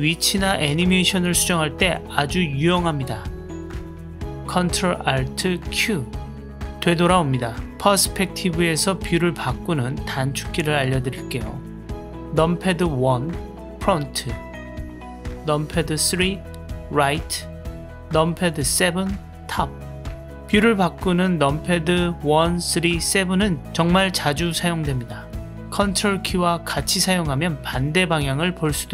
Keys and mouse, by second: 0.9 click, 2.0 click, 3.6 click, 5.3 ctrl+alt+q, 9.7 click, 12.6 KP_1, 15.8 KP_3, 18.3 KP_7, 20.8-23.5 drag.